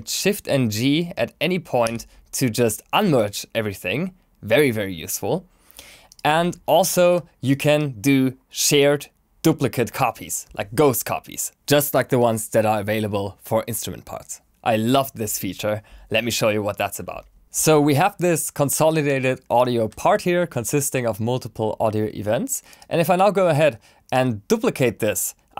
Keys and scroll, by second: 1.8 shift+g.